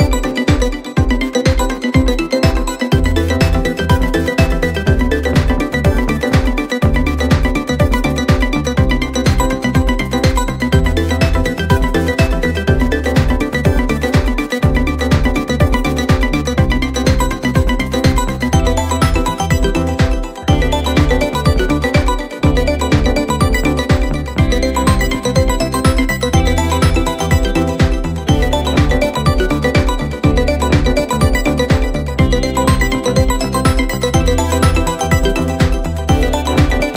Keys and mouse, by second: 15.2 middle click, 16.5 middle click, 16.8 middle click, 17.1 middle click, 17.6 middle click, 21.8 middle click, 27.2 middle click, 27.9 middle click, 28.6 middle click, 31.8 middle click, 32.8 middle click, 34.0 middle click, 34.6 middle click, 36.5 middle click.